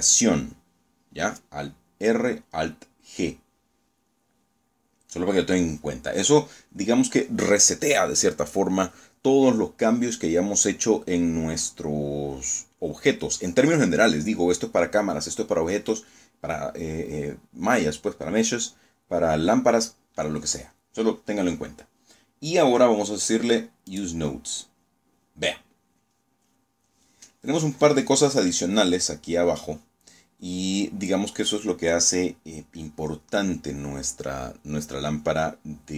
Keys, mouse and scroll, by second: 5.0-5.4 scroll up 2, 5.8 scroll down 1, 22.8 click, 29.4-29.9 scroll up 2.